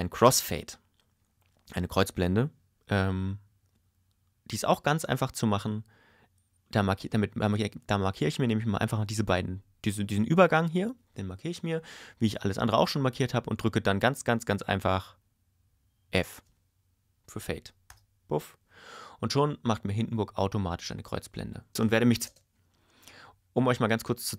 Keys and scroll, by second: 17.9 f, 21.7 space.